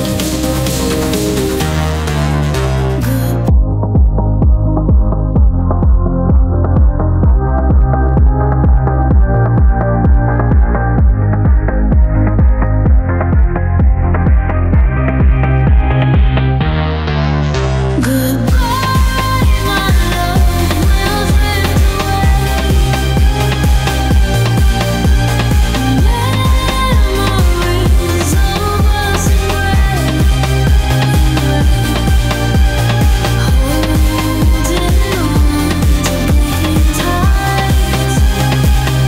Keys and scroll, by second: 18.1 space, 29.9 ctrl+z, 38.6 ctrl+g.